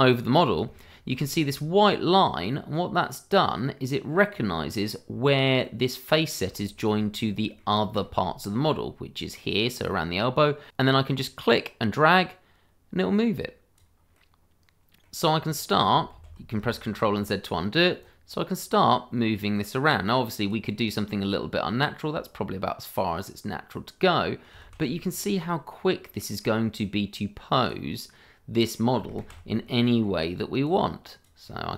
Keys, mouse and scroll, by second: 0.7 shift+middle click, 0.7 middle click, 0.8 shift+middle click, 1.2-3.2 scroll up 1, 4.3 middle click, 5.1 scroll down 1, 5.6 middle click, 6.8 shift+middle click, 7.0 scroll up 1, 7.2 middle click, 8.0 shift+middle click, 11.2 click, 14.1 middle click, 15.3-15.7 scroll down 1, 15.7 middle click, 16.1 ctrl+z, 16.7 shift+middle click, 16.8 middle click, 16.9 shift+middle click, 17.3 middle click, 18.0 click, 20.7 middle click, 24.6 ctrl+z, 25.1 middle click, 26.8 click, 27.9 middle click, 29.2 ctrl+z, 29.6 middle click, 30.6 click, 31.5 middle click.